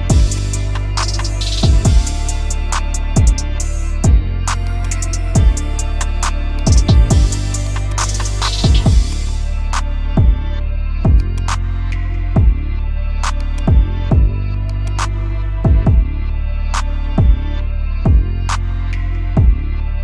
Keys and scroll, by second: 2.9 space, 6.9 ctrl+g, 7.7 c, 8.0 Escape, 16.2 shift+Page_Down.